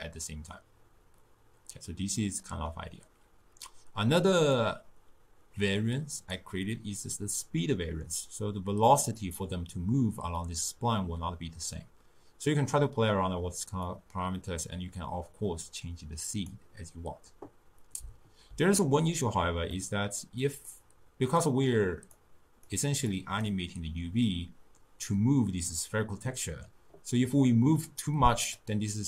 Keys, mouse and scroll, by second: 4.6-7.6 drag, 13.9-17.0 drag, 19.8-20.7 middle drag, 20.7-22.3 drag, 23.1 click, 27.3-29.0 drag.